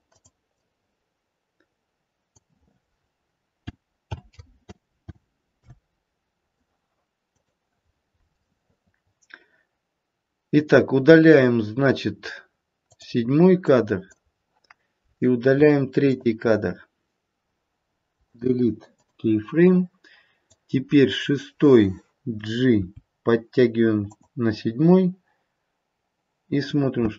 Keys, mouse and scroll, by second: 12.8 click, 13.6 click, 16.0 shift+click, 18.0 Delete, 20.4 click, 22.8 g, 26.9 space.